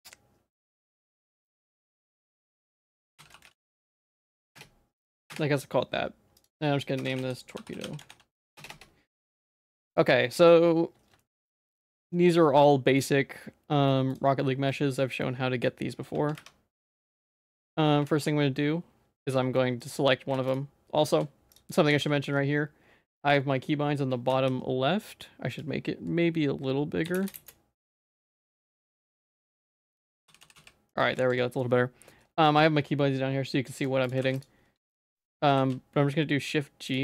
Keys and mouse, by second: 10.0 middle click, 11.2 shift+middle click, 12.6 middle click, 12.9 middle click, 14.1 click, 14.4 middle click, 15.2 middle click, 16.1 Tab, 16.3 3, 17.0 middle click, 17.7 click, 18.1 shift+g, 19.3 middle click, 20.3 shift+g, 21.1 ctrl+x, 21.1 ctrl+z, 21.9 ctrl+s, 24.3 n, 25.5-27.3 drag, 28.3 middle click, 29.7-30.5 typing, 30.9 middle click, 31.2 ctrl+s, 34.2 shift+g, 34.9 ctrl+z, 35.2 click, 35.5 shift+g.